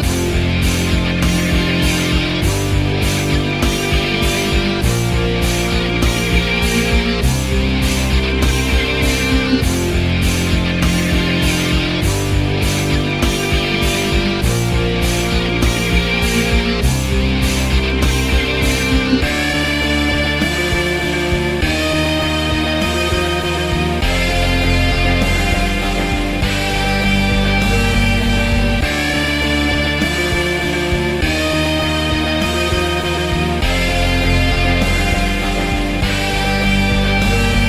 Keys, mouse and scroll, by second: 0.2 alt+middle click, 0.3-2.6 alt+drag, 2.6 alt+middle click, 2.7 alt+click, 2.9 alt+middle click, 3.1 ctrl+click, 3.6 alt+middle click, 4.0 ctrl+click, 4.6 ctrl+z, 4.9-7.0 ctrl+drag, 7.0 alt+middle click, 7.1 alt+click, 7.8 alt+middle click, 7.9 alt+right click, 8.1 alt+middle click, 8.4 alt+right click, 8.5-10.8 alt+drag, 10.8 alt+middle click, 10.8-12.3 ctrl+alt+drag, 12.3 alt+middle click, 12.5-13.9 ctrl+drag, 13.9 alt+middle click, 14.2-15.3 ctrl+alt+drag, 15.3 ctrl+z, 15.5 alt+middle click, 15.6 alt+click, 16.0 alt+middle click, 16.5-18.7 ctrl+drag, 19.2 ctrl+click, 19.7 ctrl+z, 19.9 ctrl+click, 20.8 alt+middle click, 20.9 ctrl+z, 21.0-22.3 alt+drag, 23.1 ctrl+click, 23.4 ctrl+z, 23.6 ctrl+click, 24.0 ctrl+z, 24.1 ctrl+click, 24.6 alt+middle click, 24.8 alt+shift+click, 25.4 alt+middle click, 25.5 alt+click, 25.8 alt+middle click, 26.0 alt+click, 26.2 alt+middle click, 26.3-28.0 alt+drag, 28.0 alt+middle click, 28.1-29.3 ctrl+alt+drag, 29.3 alt+middle click, 29.4-30.5 ctrl+alt+drag, 30.5 alt+middle click, 30.7-33.1 alt+drag, 33.1 alt+middle click, 33.4 alt+click, 33.5 alt+middle click, 33.7 alt+click, 34.0 alt+middle click, 34.1 alt+click, 34.3 alt+middle click, 34.5 alt+click, 34.6 alt+middle click, 34.8 alt+click, 35.8 alt+right click, 35.8-37.2 alt+drag, 37.3-37.6 alt+drag.